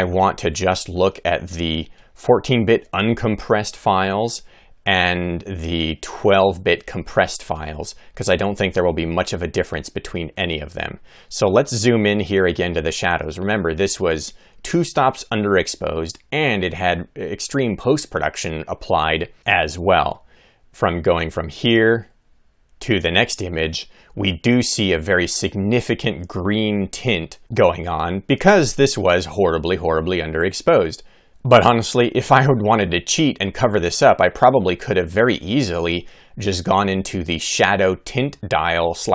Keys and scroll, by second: 22.2 Right.